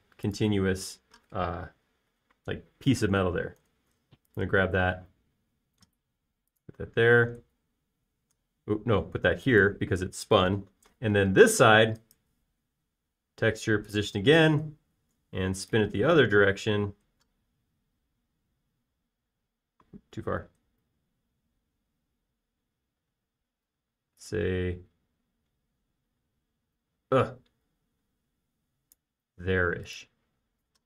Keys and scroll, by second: 5.3 super+b, 13.1 space.